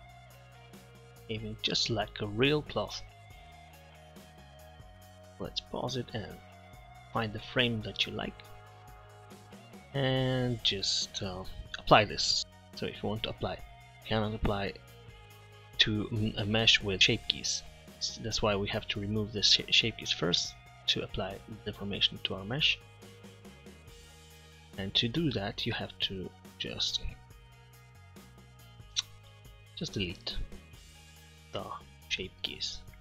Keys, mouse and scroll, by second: 0.8-1.2 middle drag, 1.5 middle click, 9.8-12.2 middle drag.